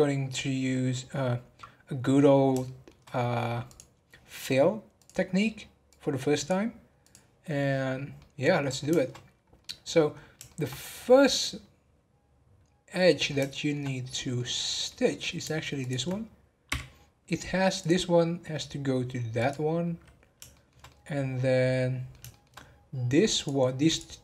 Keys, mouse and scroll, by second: 2.6-3.7 shift+middle drag, 3.7 click, 4.9-7.7 drag, 7.7 scroll down 6, 8.2 middle click, 8.5 scroll up 1, 9.3 scroll down 8, 9.6 middle click, 10.1 scroll up 3, 10.5-13.8 shift+middle drag, 13.8-14.3 scroll down 1, 14.3 middle click, 15.0-15.4 scroll up 1, 15.8 shift+click, 16.7 f, 17.0 scroll down 2, 17.8 click, 19.3 click, 20.0-20.5 scroll down 3, 20.5-22.5 shift+middle drag, 22.5-23.3 scroll up 1, 23.3 click, 23.8 click.